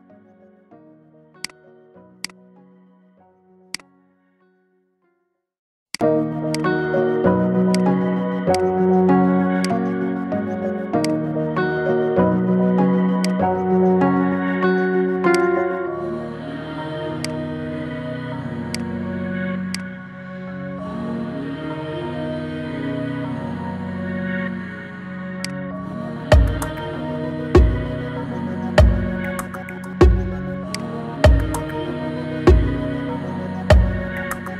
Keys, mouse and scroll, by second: 2.1 click, 2.9-3.6 scroll down 4, 3.6 drag, 4.2 scroll up 3, 4.9-5.9 middle drag, 5.9 click, 6.4 click, 7.6 click, 11.0 click, 11.6-13.0 scroll down 6, 13.0 scroll down 1, 13.1 click, 14.2-15.3 scroll up 1, 15.3 shift+click, 18.6 click, 19.6 drag, 21.8-22.4 middle drag, 22.4 scroll down 4, 24.0 KP_1, 25.3 click, 26.4 KP_0, 29.6-30.6 scroll down 5, 30.6 click.